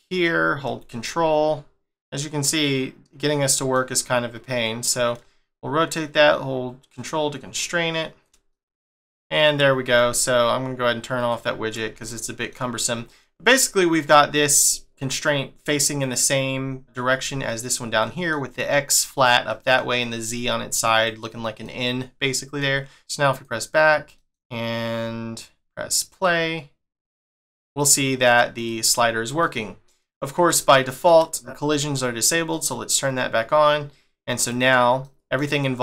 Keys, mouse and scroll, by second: 1.8 middle click, 4.6 click, 8.5 middle click, 11.2 click, 12.0 shift+middle click, 14.7 middle click, 16.0 click, 17.3 middle click, 18.0 middle click, 19.4 middle click, 20.9 click, 21.6 middle click, 22.9 click, 23.3 click, 24.1 middle click, 26.1 click, 27.7 click, 28.5 click, 29.4 middle click, 30.2-30.6 scroll up 1, 30.6 shift+middle click, 32.5 click, 34.4 click, 35.0 middle click.